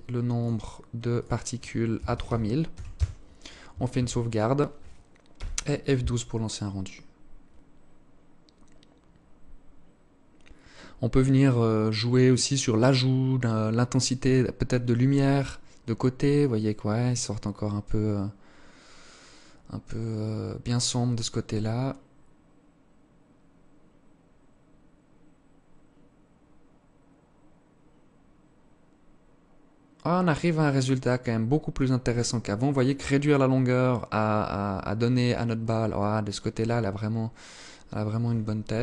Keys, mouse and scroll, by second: 0.2 click, 2.9 ctrl+s, 37.9 Escape, 38.3 scroll down 6.